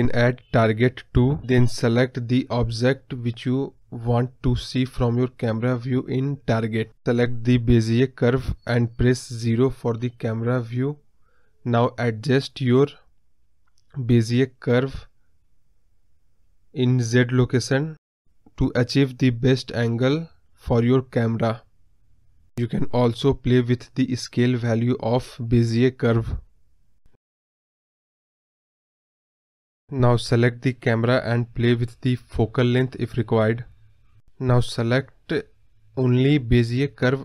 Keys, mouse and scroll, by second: 4.8 scroll up 3, 4.9 middle click, 5.5-6.2 scroll down 1, 6.2-7.2 middle drag, 7.2 click, 8.7-9.8 drag, 9.8 ctrl+z, 10.5-11.6 drag, 11.6-12.0 middle drag, 12.0 scroll up 4, 12.2-13.7 scroll down 6, 12.3-12.6 middle drag, 13.7 KP_0, 15.0-16.4 drag, 18.4 click, 20.3-23.2 drag, 24.8-27.0 drag, 28.2 click, 28.7 ctrl+z, 28.7 scroll down 3, 28.8 middle click, 29.0-29.8 middle drag, 29.8 KP_0, 32.0 click, 33.0 scroll up 2, 34.4-35.4 scroll down 2, 35.9 middle click, 36.1-36.6 scroll down 6, 36.6 middle click.